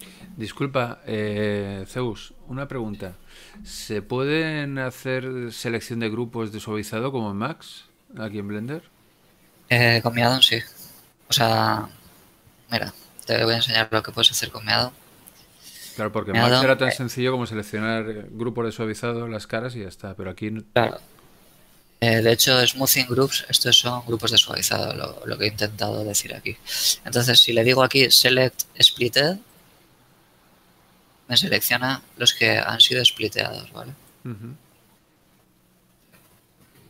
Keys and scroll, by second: 0.7 ctrl+r, 10.3 Tab, 14.9 a, 15.3 z, 35.0 ctrl+Tab, 36.6 ctrl+Tab.